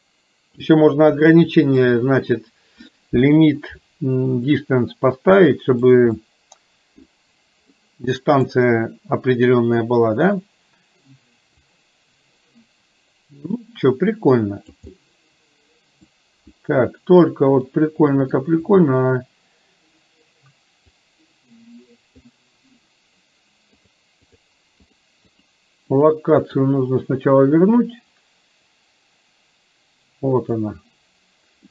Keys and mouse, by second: 2.0 middle click, 4.6-5.9 middle drag, 6.3 middle click, 7.8 middle click, 11.9-14.8 drag, 14.9-16.1 middle drag, 17.8 middle click, 21.0-22.3 drag, 24.3 click, 26.0 click, 26.5 click, 28.1-30.6 drag.